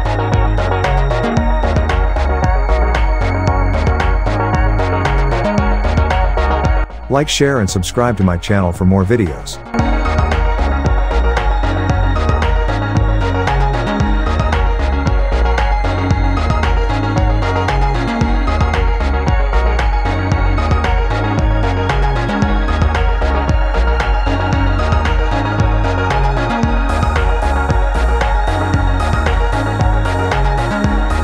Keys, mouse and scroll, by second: 2.2 click, 4.3 click, 7.5 click, 9.4-10.3 click, 9.7 space, 10.9-12.5 alt+drag, 13.8-15.5 drag, 15.6 alt+scroll up 1, 16.0 click, 16.6-19.7 alt+drag, 21.2 alt+scroll down 1, 22.4 space, 22.5 click, 22.7 space, 23.8 click, 30.1 shift+click.